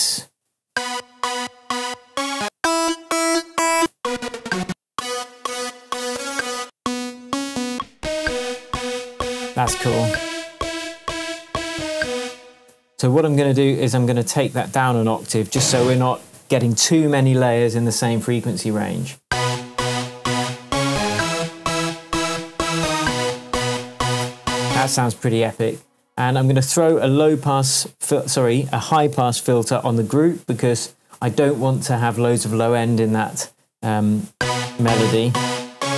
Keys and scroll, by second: 0.6 space, 12.1 space, 14.9 super+a, 15.4 shift+super+Down, 15.9 shift+Tab, 19.2 space, 24.2 k, 24.7 space, 34.3 space.